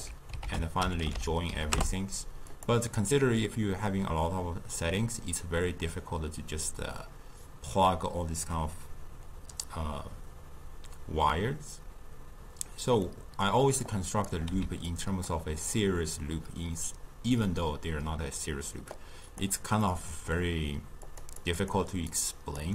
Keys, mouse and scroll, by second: 0.5 ctrl+a, 13.0-13.8 middle drag, 13.8-14.5 drag, 14.5 x, 14.9 click, 18.9-19.8 drag, 19.8-21.1 middle drag, 21.1 click, 21.4 click.